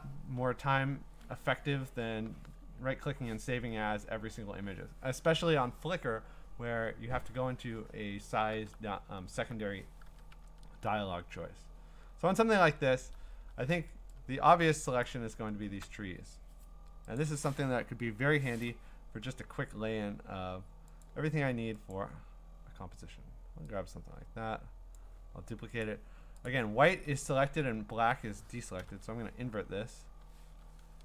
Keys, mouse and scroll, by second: 8.4 scroll, 8.5 alt+Tab, 9.3 alt+Tab, 10.1 alt+Tab, 10.4 alt+Tab, 12.2-13.7 scroll, 13.5-14.3 typing, 13.7 scroll, 15.0 click, 15.4 scroll, 17.2 click, 18.6 click, 21.0 click, 21.9 click, 25.0 click, 25.8 click, 26.5 click, 27.3-28.1 scroll, 28.8 ctrl+i.